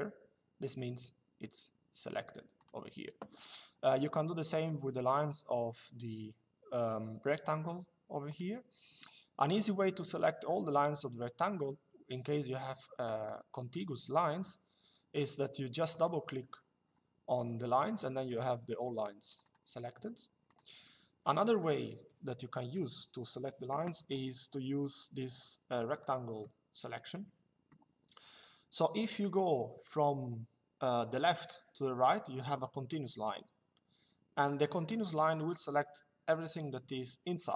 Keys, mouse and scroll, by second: 2.3 click, 4.2 click, 5.4 click, 6.5 click, 8.0 click, 15.6 click, 18.0 click, 24.7 click, 26.1 click, 29.6 click.